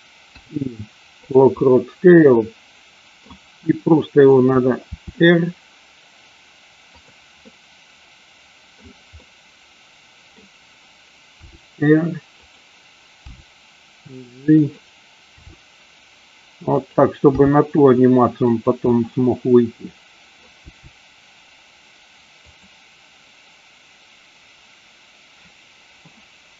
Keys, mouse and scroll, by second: 0.2 i, 1.8-3.5 middle drag, 4.0-4.7 middle drag, 5.1 r, 7.0 click, 7.5-9.0 middle drag, 9.4-10.5 middle drag, 11.6 r, 13.3 g, 15.4 r, 16.9 click, 17.5 g, 18.6 click, 19.0-20.6 middle drag, 20.6 g.